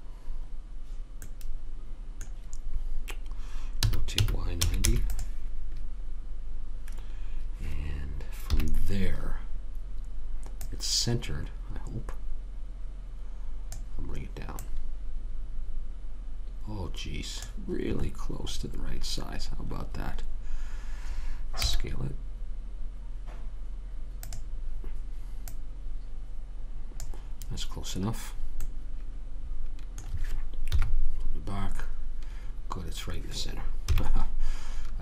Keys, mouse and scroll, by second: 1.6 middle click, 4.2 r, 8.8 KP_3, 10.9 click, 14.9 click, 18.3-22.0 middle drag, 22.0 s, 25.8 click, 31.0 KP_1, 34.3 KP_3.